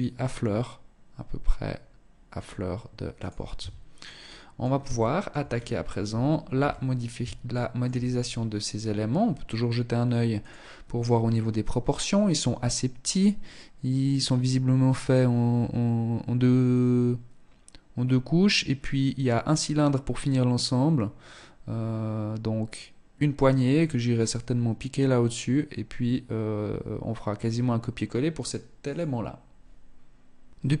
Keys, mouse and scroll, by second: 2.8 Tab, 3.3 middle click, 4.2 shift+middle click, 4.6-5.7 scroll down 6, 5.8 KP_1, 6.7 shift+middle click, 7.3-7.7 scroll up 2, 9.7 scroll, 29.6 Tab, 30.1-30.8 scroll up 4.